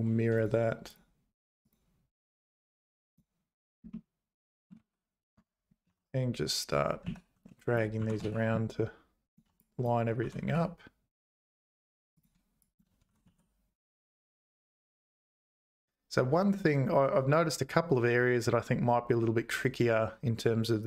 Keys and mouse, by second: 0.4 click, 1.0 click, 3.0 click, 3.9 middle click, 4.9 `, 5.4 Tab, 5.9 a, 7.0 z, 7.4 1, 7.6 click, 8.0 g, 9.6 click, 10.2 g, 12.7 click, 13.0 g.